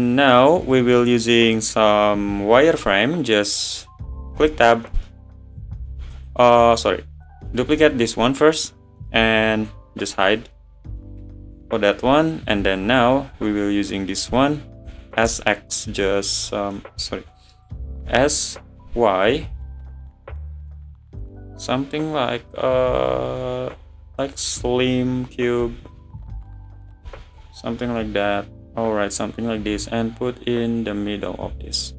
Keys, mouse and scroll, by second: 4.4 Tab, 5.1 middle click, 6.0 Tab, 6.1 click, 6.5-7.7 middle drag, 7.7 shift+d, 8.2-9.6 middle drag, 9.6 click, 10.3 click, 11.0-12.1 middle drag, 12.1 `, 13.4 scroll up 1, 14.9 s, 16.5-17.0 middle drag, 17.0 ctrl+z, 18.0 s, 23.7 `, 25.2-25.6 scroll up 2, 25.6 s, 27.0 s, 29.6 click, 31.5 `.